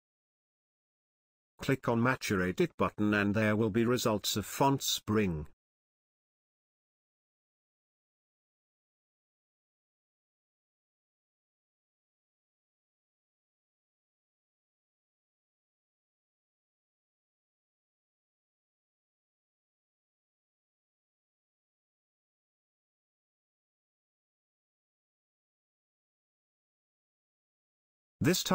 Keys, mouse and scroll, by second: 8.3-11.1 drag, 22.5-26.6 drag.